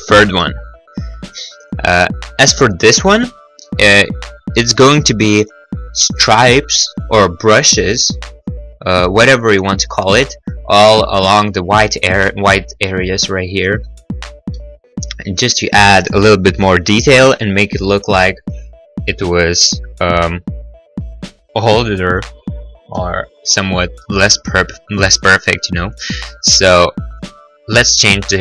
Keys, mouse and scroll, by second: 0.2 scroll, 3.6 middle click, 4.1 middle click, 14.6 middle click, 14.8-15.1 scroll, 14.9 middle click, 23.0 middle click, 23.3 middle click, 23.5-24.3 scroll, 27.2 click.